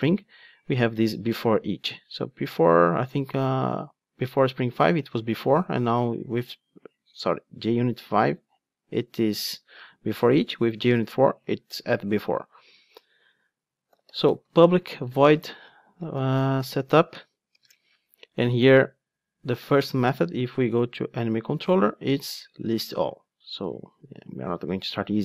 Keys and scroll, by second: 1.2 Return, 21.2 super+b, 24.0 ctrl+Tab.